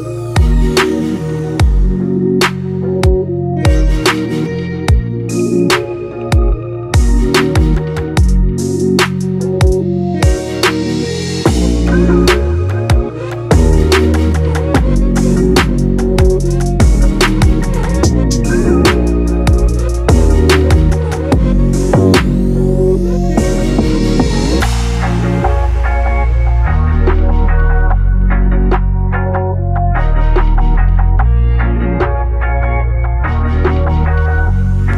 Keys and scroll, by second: 3.4 ctrl+e.